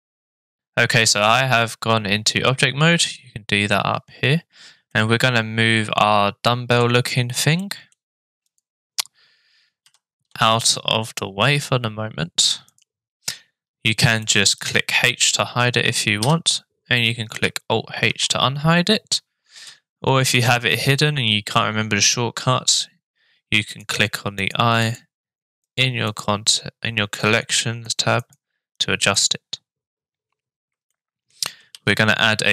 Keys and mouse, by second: 0.0 middle click, 4.9-6.8 middle drag, 7.6 middle click, 8.6 click, 9.8 g, 14.2-14.7 shift+middle drag, 16.2 h, 18.1 alt+h, 19.5 h, 23.7 click, 24.4 click, 24.8 click, 25.6 click, 26.1 click, 27.9 click, 28.2 click, 29.2 click, 30.9-31.3 shift+middle drag, 31.7 shift+a.